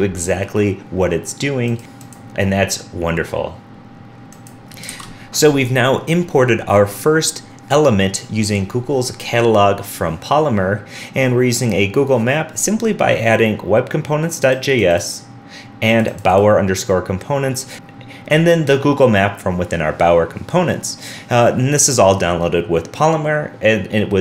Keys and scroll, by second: 4.9 super+s.